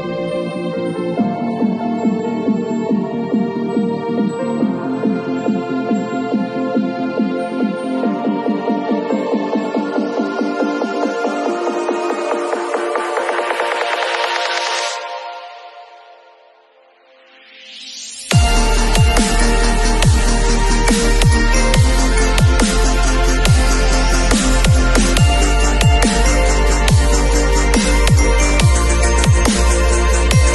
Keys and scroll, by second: 0.0-1.7 typing, 3.4 ], 5.4 v, 21.8 space, 23.4 super+l.